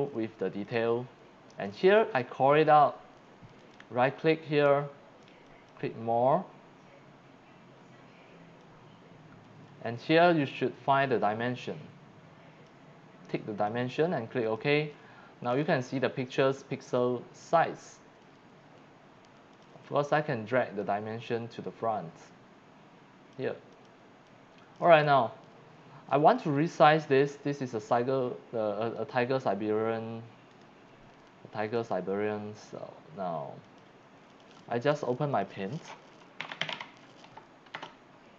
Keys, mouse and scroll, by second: 0.6 click, 1.7 click, 3.6 right click, 5.5 click, 8.6-12.6 drag, 13.6 click, 14.4 click, 17.0 click, 19.5 click, 20.8-23.3 drag, 23.7 click, 24.3 click, 27.2 right click, 27.8 click, 29.0 click, 30.5 right click, 31.8 click, 33.7 click, 34.3 click, 35.3 click, 36.2-37.2 typing.